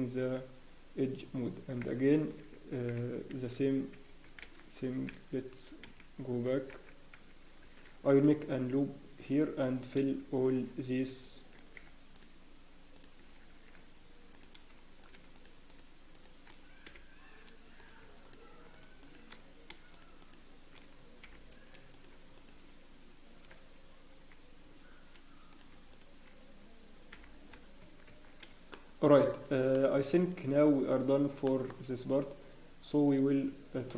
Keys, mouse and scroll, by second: 8.1 ctrl+r, 14.3 click, 15.3 shift+click, 16.8 f, 17.7 click, 18.2 shift+click, 19.2 click, 21.2 f, 21.9 click, 22.3 shift+click, 24.3 f, 25.7 click, 27.1 f, 27.4 scroll, 27.8 Tab, 27.8-28.5 scroll down 5, 28.1 Tab, 28.2 scroll up 1, 28.7 shift+middle click, 29.2 scroll up 1, 29.7 shift+middle click, 30.2-30.9 scroll up 1, 30.9-31.3 scroll down 1, 31.4 shift+middle click, 32.1 scroll up 1, 33.0 click, 33.0-33.4 scroll down 2.